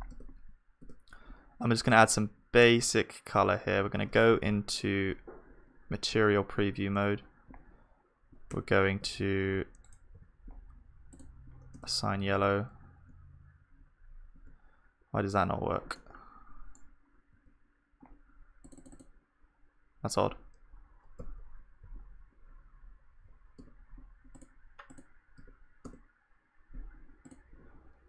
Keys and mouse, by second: 0.1 Tab, 0.8 Tab, 4.5 z, 8.6 Tab, 9.0 z, 10.1 a, 11.7 Tab, 11.7-13.9 drag, 13.0 Tab, 14.3 Tab, 16.0-19.3 middle drag, 17.4 Tab, 19.3-21.2 drag, 21.2 z, 21.8 z, 23.6 Tab, 24.6-28.0 drag, 25.4 Tab.